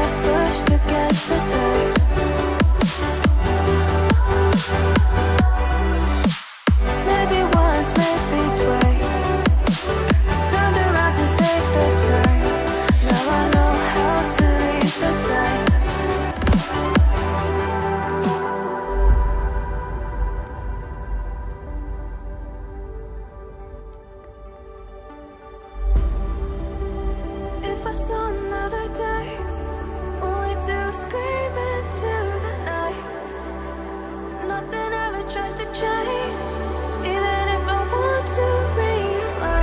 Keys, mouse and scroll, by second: 4.6-6.1 ctrl+scroll down 1, 29.0-30.1 ctrl+scroll up 2, 30.1-30.7 ctrl+scroll up 1, 30.7-31.4 ctrl+scroll down 1, 33.0 ctrl+scroll down 1, 33.2 right click, 37.7 ctrl+shift+click.